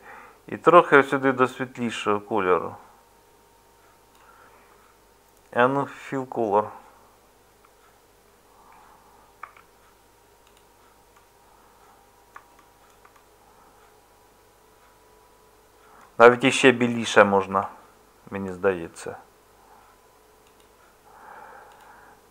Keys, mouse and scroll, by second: 7.5 Tab, 9.4 Tab, 16.3 Tab, 17.5 Tab.